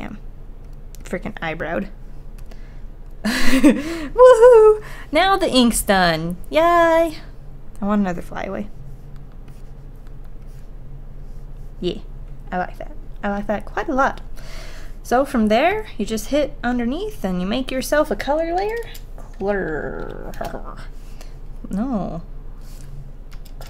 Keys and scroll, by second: 10.1 ctrl+z.